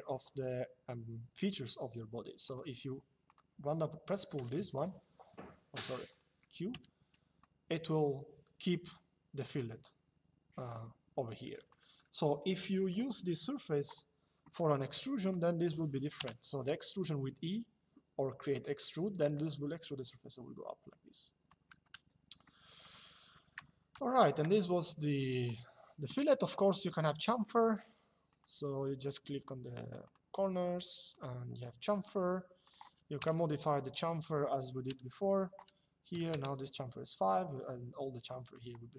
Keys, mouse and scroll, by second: 2.1 click, 4.1 q, 5.2 Escape, 5.8 click, 11.7 Escape, 12.6 click, 13.1 Escape, 14.4 middle click, 15.9 e, 19.1 click, 21.6 Escape, 22.1 middle click, 24.9 click, 26.2 click, 29.7 click, 30.8 click, 32.9 KP_Enter, 35.8 KP_5, 36.0 KP_Enter, 38.2 click.